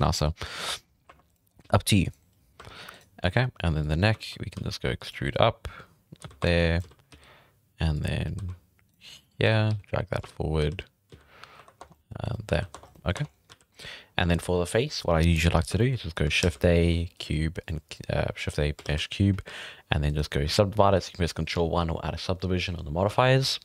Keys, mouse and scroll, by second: 0.6 Tab, 0.8 scroll up 6, 1.1 1, 1.3 right drag, 1.5 right click, 1.6 g, 2.4 shift+middle drag, 2.6-2.9 scroll up 3, 2.9 right drag, 3.2 g, 4.0 scroll down 3, 4.1 shift+middle click, 4.3 scroll up 1, 4.5 e, 6.2 z, 6.4 1, 6.5 drag, 6.8 z, 7.1 g, 8.4-11.5 typing, 9.2-9.7 drag, 11.4 scroll up 1, 11.8 Tab, 11.8 scroll down 2, 11.9-12.2 middle drag, 12.5 alt+a, 12.7 Tab, 12.8 scroll up 3, 12.9 middle drag, 13.1 Tab, 13.2 scroll down 5, 13.5 alt+a, 14.0-15.7 scroll down 4, 15.7-16.4 shift+middle drag, 16.4 shift+a, 18.0-18.8 scroll down 3, 18.8 shift+a, 19.4 s, 20.8 ctrl+1, 23.2-23.6 shift+middle drag.